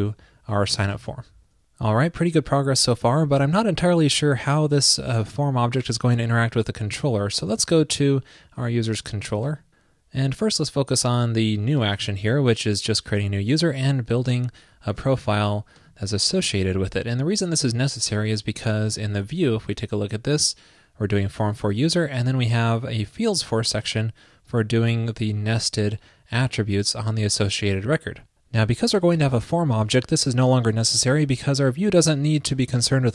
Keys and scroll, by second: 0.7 super+v, 0.9 super+s, 19.2 alt+super+Down.